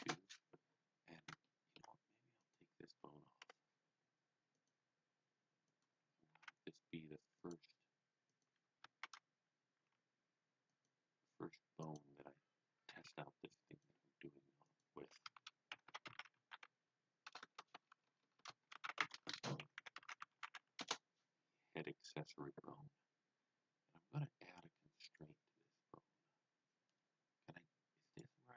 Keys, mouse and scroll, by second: 0.0-0.3 typing, 1.5 shift+middle click, 2.3 click, 3.4 Delete, 4.5 click, 5.7 click, 6.0-6.9 typing, 7.4 click, 8.2 click, 9.0 shift+d, 10.7 click, 11.8 click, 12.6-13.5 typing, 13.7 click, 14.6 click, 15.3-21.0 typing, 25.0 click, 28.0 click, 28.0 click.